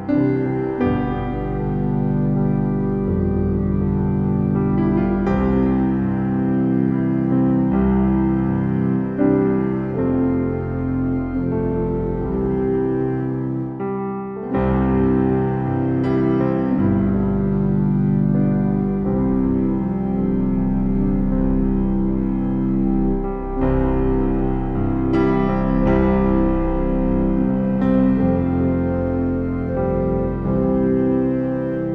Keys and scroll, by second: 1.7 ].